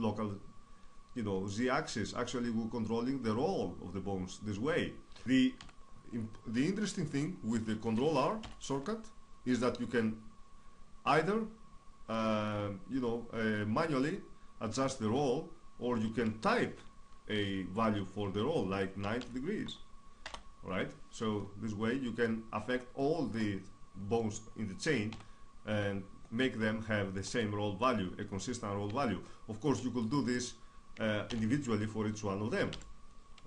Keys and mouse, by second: 5.2-8.0 middle drag, 5.4 KP_3, 8.2 ctrl+r, 21.0-22.8 middle drag, 24.8 KP_3, 30.9 ctrl+r, 31.0 right click.